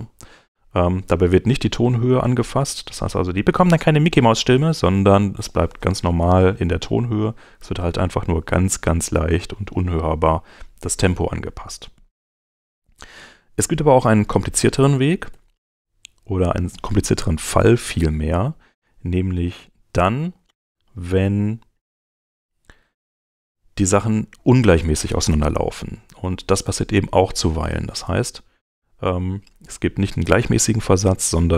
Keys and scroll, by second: 14.5 super+z.